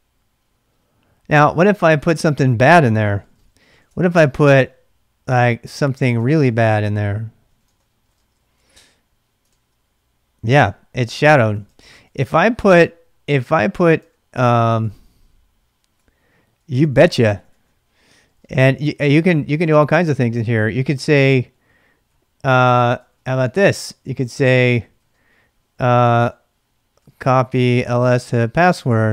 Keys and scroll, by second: 2.9-4.3 typing, 4.4 Return, 6.0-8.9 typing, 9.5 ctrl+c, 11.3-19.3 typing, 19.5 Return, 20.3 ctrl+[, 20.9-22.1 typing, 23.1 ctrl+[, 23.1 typing, 24.0 ctrl+[, 24.8-29.1 typing.